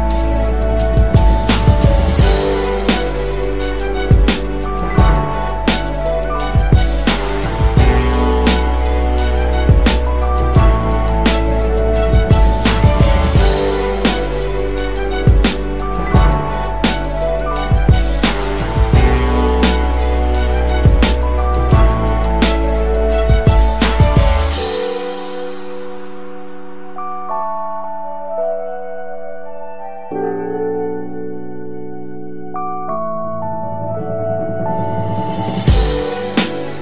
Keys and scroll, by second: 5.7 ctrl+shift+z, 30.9 ctrl+alt+d, 31.3 ctrl+alt+d, 31.5 ctrl+alt+d, 31.6 ctrl+alt+d, 31.8 ctrl+alt+d, 31.9 ctrl+alt+d, 32.2 ctrl+alt+d, 32.4 ctrl+alt+d, 32.6 ctrl+alt+d, 32.7 ctrl+alt+d, 32.9 ctrl+alt+d, 33.0 ctrl+alt+d, 33.2 ctrl+alt+d, 33.4 ctrl+alt+d, 33.6 ctrl+alt+d, 36.5 ctrl+d, 36.6-36.8 ctrl+d.